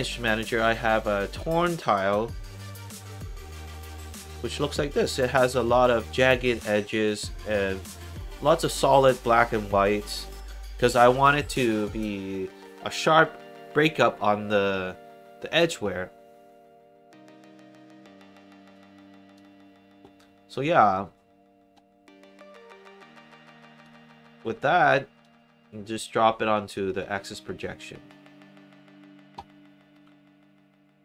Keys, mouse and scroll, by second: 2.5 click, 2.8 click, 4.4 click, 18.7 click, 23.7 click, 25.1 click, 29.9 click, 30.7 middle click.